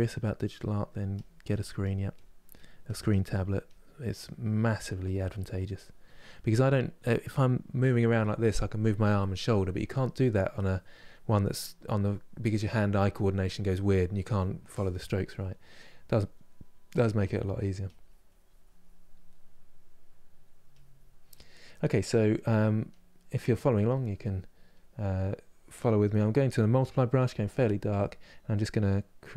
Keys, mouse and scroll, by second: 3.7 middle click, 4.6-6.2 drag, 6.2-10.4 middle drag, 10.4-14.7 drag, 14.7 middle click, 15.3-17.1 drag, 17.5-18.9 drag, 18.9-20.4 middle drag, 20.4-28.2 drag, 28.2-29.2 middle drag, 29.2-29.3 drag.